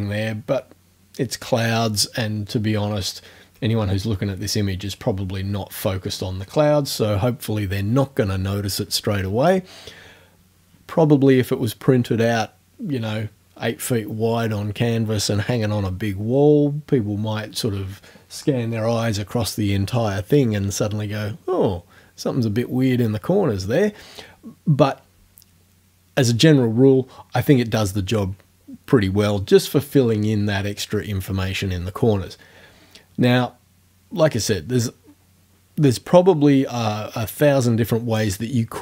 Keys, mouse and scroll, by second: 3.0-4.1 ctrl+scroll down 2.